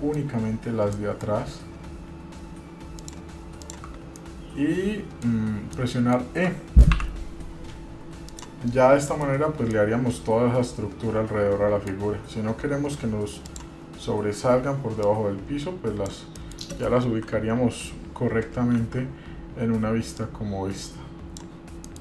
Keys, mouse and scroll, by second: 0.7 scroll up 3, 1.1 shift+middle click, 1.6 scroll up 1, 3.1 shift+click, 3.8 shift+click, 4.2 scroll down 2, 4.4-5.5 middle drag, 6.0 shift+middle click, 7.1 e, 10.0-12.1 middle drag, 13.6 click, 15.2-16.3 drag, 16.5 middle click, 17.3 KP_1, 17.8-18.2 scroll up 1, 19.0 shift+z, 20.4-21.7 drag.